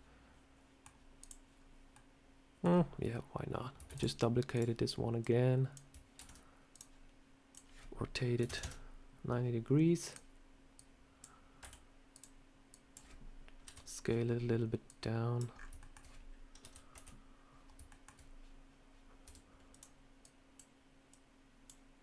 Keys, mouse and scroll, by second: 1.1 click, 1.4 scroll up 1, 1.8 middle click, 2.6-2.9 scroll up 2, 3.8 shift+d, 4.4 click, 5.1 click, 6.1 ctrl+z, 6.6 click, 7.4 click, 10.0 click, 10.6 click, 11.5 s, 12.6 click, 13.5 KP_3, 14.7 click, 15.4 scroll up 4, 15.7 shift+middle click, 16.5 KP_3, 16.8 KP_1, 17.8 shift+middle click, 19.1 r, 20.1 click, 21.0 click.